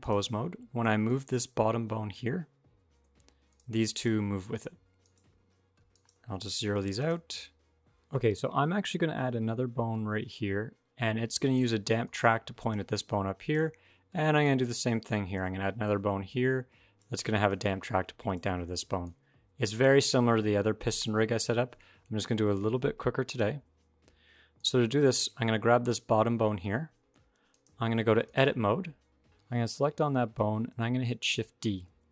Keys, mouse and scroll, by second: 7.8 click, 8.6 d, 9.0 click, 11.4-14.2 typing, 11.8 click, 12.9 click, 14.2 click, 16.8-18.8 typing, 18.2 click, 18.9 click, 23.1 click, 24.0-26.2 scroll up 3, 24.4 click, 27.3 click, 29.2 click, 29.6 click, 31.7 shift+d.